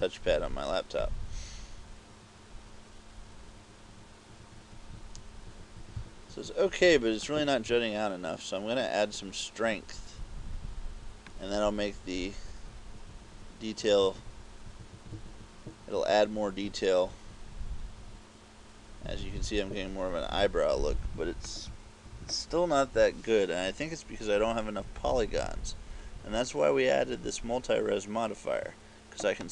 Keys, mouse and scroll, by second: 1.1 click, 8.9 click, 11.4 click, 21.2 KP_6, 21.5 KP_6, 21.8 KP_6, 22.1 KP_6.